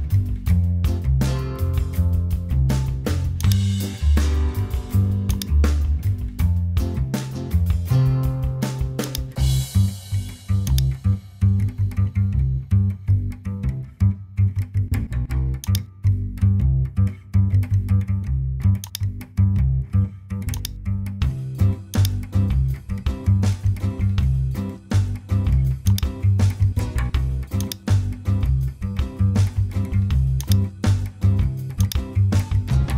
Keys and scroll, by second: 22.8-24.3 typing, 26.9 super+t.